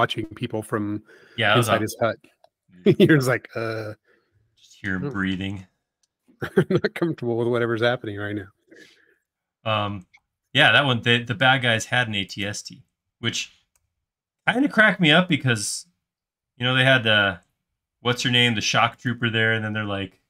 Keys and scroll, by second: 10.1 m, 19.5 q.